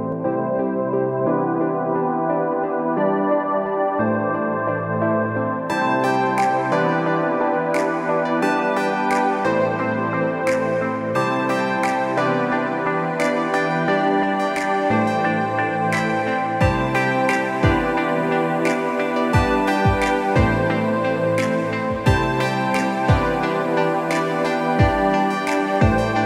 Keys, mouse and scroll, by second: 0.7 ctrl+r, 5.6-9.9 drag, 11.0 Tab, 12.8-15.2 drag, 15.7 click, 17.1 click, 17.5 click, 18.2-20.4 drag, 21.4-26.2 drag.